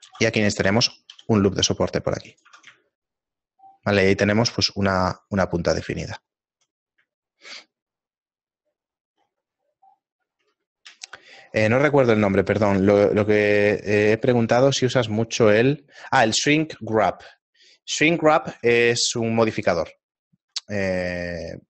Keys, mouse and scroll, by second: 0.5 ctrl+r, 2.5 Tab, 7.2 shift+middle click, 7.9 middle click, 8.5 scroll down 2, 9.3 scroll down 8, 10.6 scroll down 2, 19.4 scroll down 3, 19.4 x, 20.3 right click, 20.3 scroll down 8, 20.4 x.